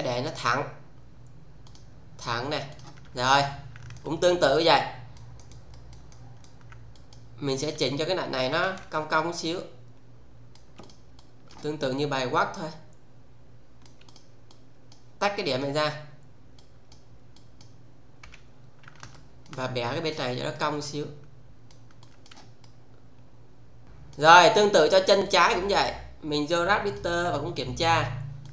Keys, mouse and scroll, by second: 1.6 click, 2.7 click, 3.9 alt+right click, 8.5 w, 9.0-10.6 shift+middle click, 10.7-11.7 click, 11.7-13.9 shift+middle click, 14.0 click, 16.5-17.2 click, 18.2 f, 19.1-19.7 alt+middle click, 19.8 click, 22.0 click, 22.6-24.3 shift+middle click, 23.8 click, 25.2 click, 26.8 click, 28.3 click.